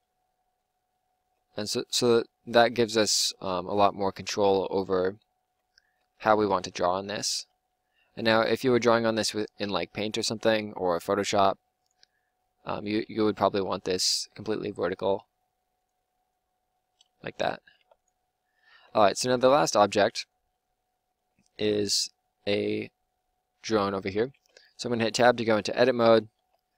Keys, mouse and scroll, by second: 1.2 Tab, 5.4 Tab, 5.8 Tab, 7.3 r, 8.4 g, 9.6-13.0 typing, 16.1 click, 17.2 middle click, 17.8 ctrl+s, 18.6 Tab, 24.3 Tab, 24.3 middle click, 26.0 middle click, 26.0 a, 26.3 a.